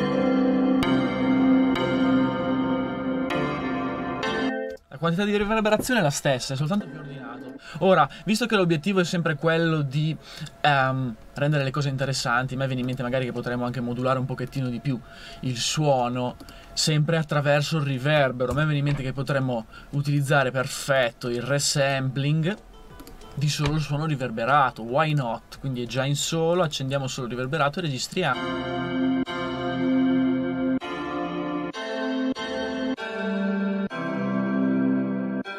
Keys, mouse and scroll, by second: 18.5 a.